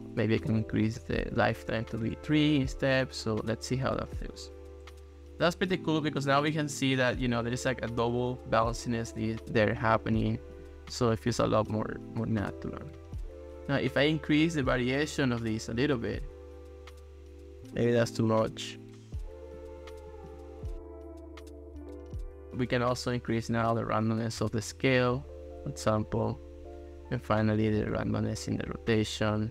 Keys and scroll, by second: 0.6 3, 2.1 Return.